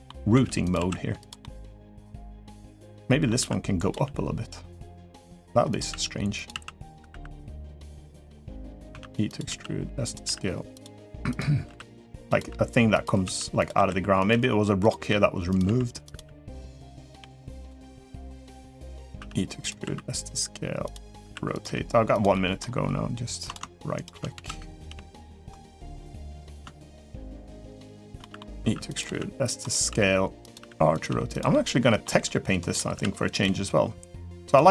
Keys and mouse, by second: 0.1 e, 0.5 s, 1.2 middle click, 2.6 middle click, 3.5 r, 3.7 g, 4.8 r, 5.7 e, 6.3 s, 6.8 r, 8.0-16.9 typing, 17.6 middle click, 18.1 g, 18.9 e, 19.4 s, 21.0 r, 21.4 g, 22.1 middle click, 23.3 g, 24.6 g, 24.6 s, 26.9 shift+click, 27.3 shift+click, 28.0 middle click, 28.4-30.8 typing, 31.3 middle click, 31.9 g, 32.7 r, 33.2 g, 34.5 e.